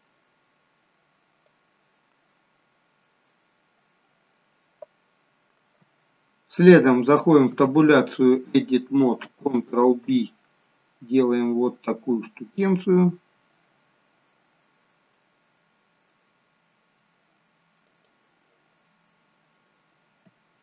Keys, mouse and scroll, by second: 7.5 Tab, 9.9 ctrl+b.